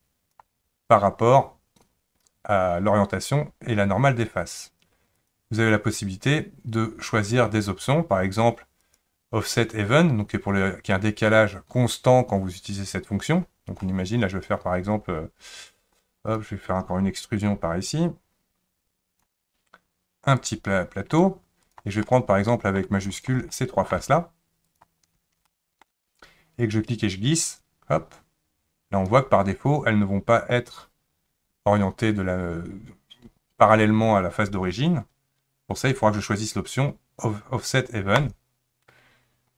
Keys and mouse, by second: 5.1 click, 8.8 click, 13.8-16.0 middle drag, 16.3 click, 17.9 click, 18.1-19.2 drag, 20.4 click, 20.6 click, 21.7 click, 22.0 middle click, 23.1 shift+click, 23.5 middle click, 24.7 shift+click, 25.5 shift+middle click, 27.0-29.1 drag, 38.2 click.